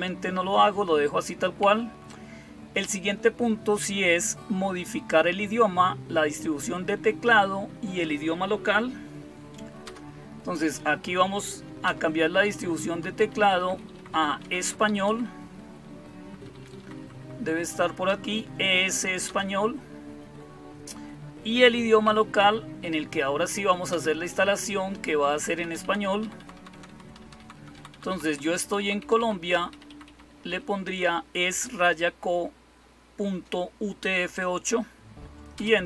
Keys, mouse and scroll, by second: 1.5 Down, 9.7 Return, 11.7 Return, 13.1 Up, 13.3 Up, 13.5 Up, 13.6 Up, 13.8 Up, 14.3 Down, 14.5 Down, 14.7 Up, 15.0 Up, 15.2 Up, 15.8-16.5 Up, 16.7 Up, 17.1 Up, 17.2 Up, 18.0 Down, 19.2 Return, 21.9 Down, 23.8 Return, 25.5 Down, 25.7 Down, 25.9 Down, 26.1 Down, 26.3 Down, 26.6 Down, 26.8 Down, 27.1 Down, 27.3 Down, 27.4 Down, 27.8 Down, 28.0 Down, 28.3 Down, 28.5 Down, 28.9 Down, 29.1 Down, 29.4 Up, 29.6 Up, 29.8 Up, 30.0 Up, 30.2 Up, 35.4 Return.